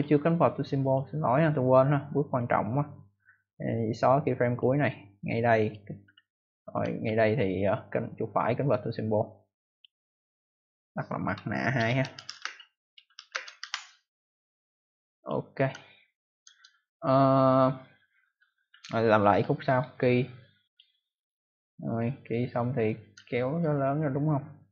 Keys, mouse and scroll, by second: 0.7 click, 2.1 right click, 4.4 click, 5.5 click, 6.1-6.6 ctrl+alt+scroll up 2, 7.0 ctrl+alt+scroll down 1, 8.5 right click, 9.6 click, 11.2-14.0 typing, 15.1 click, 15.7 ctrl+alt+scroll down 1, 18.5-19.2 ctrl+alt+scroll down 1, 19.2 click, 19.6 right click, 19.7 double right click, 20.6 click, 23.1-23.5 ctrl+alt+scroll down 1.